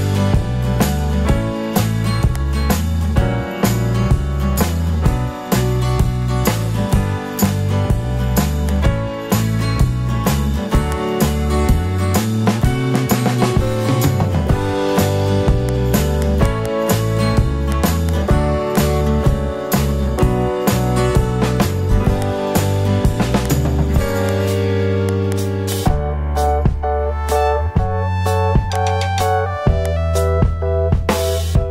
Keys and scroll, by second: 4.4 super+i, 6.6 super+i.